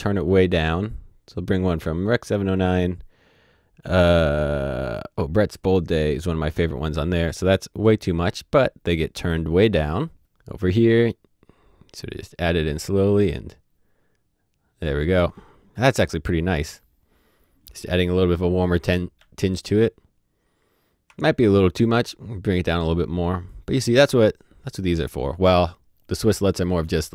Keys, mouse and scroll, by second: 6.2 click, 10.1 click, 18.0 click, 18.1 ctrl+d, 19.1 ctrl+d, 23.4 ctrl+d, 23.6 click.